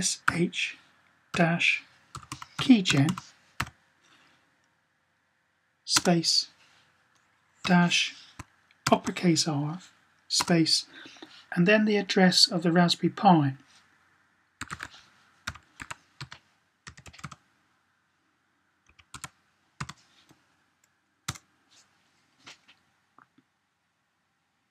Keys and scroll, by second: 0.0-3.9 typing, 7.4 typing, 8.6 typing, 14.3-19.6 typing.